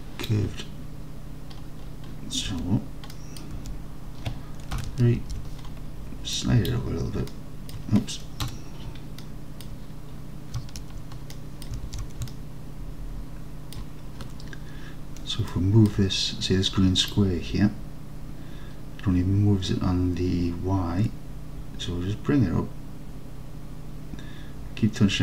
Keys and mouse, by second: 3.2 middle drag, 3.6 Tab, 4.8 KP_3, 5.3 alt+z, 6.4-7.3 drag, 7.3-7.7 alt+middle drag, 8.5 KP_Decimal, 9.3-9.7 alt+middle drag, 11.4-11.7 middle drag, 11.9 alt+z, 12.3-13.8 alt+drag, 15.5 alt+click, 17.3-25.2 drag.